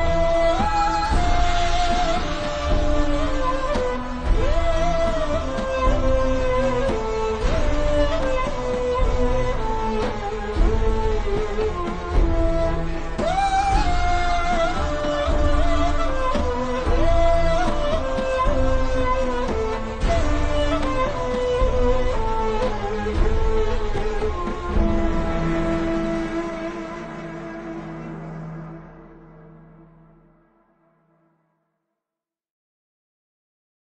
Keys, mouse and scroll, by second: 0.6-0.9 alt+shift+scroll down 2, 1.1-1.4 scroll up 1, 1.4 click, 2.4 alt+shift+scroll up 1, 3.0 click, 4.6 click, 5.1 scroll down 1, 5.7 click, 7.0 a, 7.4 click, 10.4 v, 10.7 click, 12.2 a, 13.0 click, 15.1 click, 19.1 click, 32.0 click.